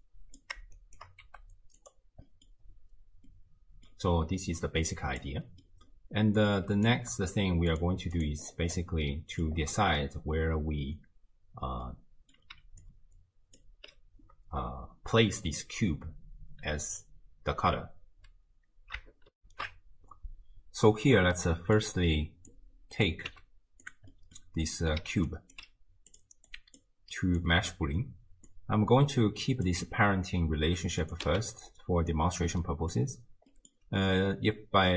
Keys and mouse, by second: 0.0-0.4 drag, 0.8 shift+click, 2.3 middle drag, 3.3-4.0 drag, 4.6 middle click, 5.5 drag, 6.4-6.9 drag, 7.0 g, 8.2 click, 9.1-9.5 middle drag, 11.9-12.4 middle drag, 12.6-13.9 d, 12.9 click, 19.4 ctrl+alt+shift+w, 19.6 ctrl+alt+shift+q, 21.4-21.9 drag, 22.7 click, 23.3 g, 24.2 middle click, 24.7 middle click, 25.0 d, 25.3 click, 25.6 d, 26.2 drag, 26.5-26.8 drag, 27.4-27.8 drag, 28.5 click, 31.0 click, 31.3 x, 32.6-33.0 drag, 33.7 click.